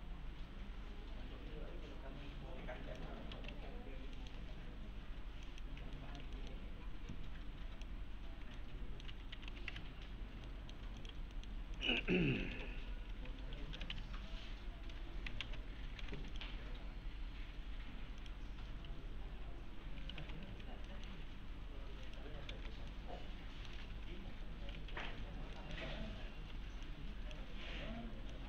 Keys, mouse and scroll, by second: 3.1-4.0 typing, 3.8-4.2 scroll down 1, 4.2 middle click, 4.5-5.5 scroll up 1, 5.5 click, 6.0 alt+middle click, 6.4 scroll up 1, 7.1-8.0 click, 8.0 scroll down 1, 8.6-9.2 alt+middle click, 8.9-10.0 typing, 10.0 scroll down 1, 10.0-10.4 scroll up 1, 10.5 alt+middle click, 11.0 click, 11.4 middle click, 11.8 click, 12.0 alt+x, 12.5 F4, 13.9 F3, 15.4 alt+x, 16.0 alt+x, 16.3 click, 18.2 click, 20.2 l, 20.5 z, 20.9 middle click, 21.2-22.1 scroll down 1, 22.1 click, 22.5 alt+x, 22.9-23.9 alt+middle click, 23.9 F4, 24.7-26.5 typing, 25.6 middle click, 26.2 scroll down 1, 26.9-27.5 click.